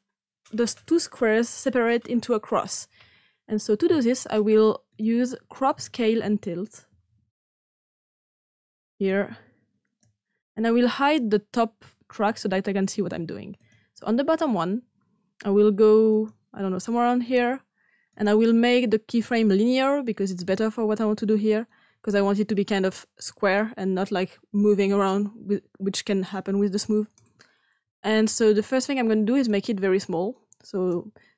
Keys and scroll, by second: 6.6-7.5 typing.